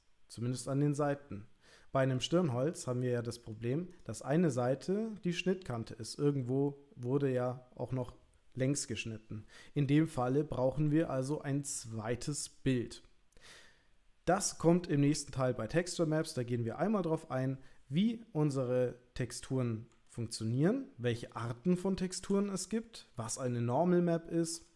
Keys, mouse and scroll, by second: 2.3-3.6 middle drag, 3.9 click, 18.9 middle click, 20.1-21.2 ctrl+middle drag, 21.5 shift+middle click, 22.4 middle click, 23.3-24.5 ctrl+middle drag.